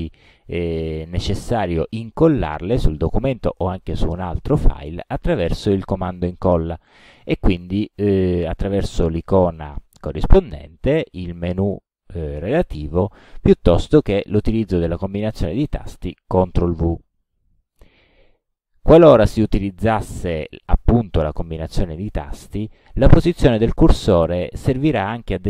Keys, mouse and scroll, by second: 11.1 click, 15.7 click, 17.3 ctrl+v.